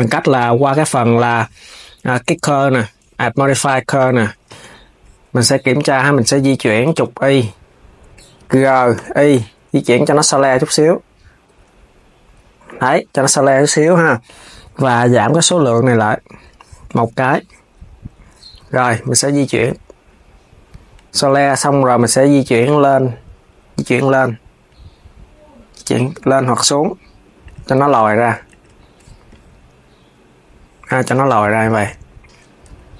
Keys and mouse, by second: 0.4 click, 4.2 KP_3, 6.7 KP_1, 8.4 g, 15.6-18.3 drag, 18.3 KP_3, 19.2 g, 21.1 z, 27.5 Tab, 28.1 Tab, 28.2 click, 32.3 KP_3.